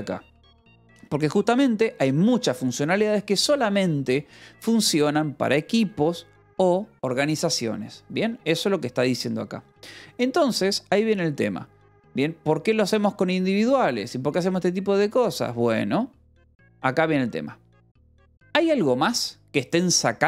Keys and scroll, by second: 0.8 Escape, 1.2 l, 10.0 j.